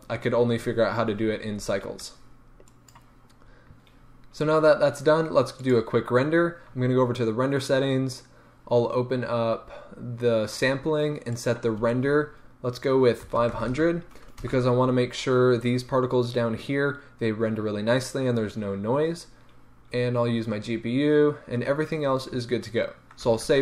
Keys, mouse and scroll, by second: 2.6-5.8 drag, 11.3-23.6 drag, 13.6 KP_0, 14.5 Return.